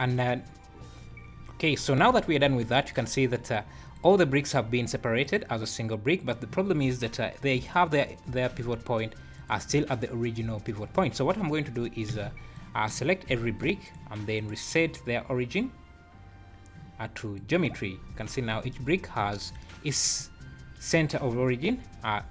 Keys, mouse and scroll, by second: 0.4 scroll down 3, 1.3 scroll up 2, 1.7 `, 2.1 scroll up 2, 2.4 `, 3.6 scroll down 2, 3.9 click, 5.2 click, 6.2 click, 6.6 scroll up 3, 8.6 alt+a, 9.3 click, 10.5 scroll down 4, 10.9 click, 11.2 scroll down 2, 11.4 `, 12.1 h, 12.5 click, 13.3 b, 14.3 right click, 18.2-18.6 scroll up 9, 19.1 `, 20.2 `, 21.3 `.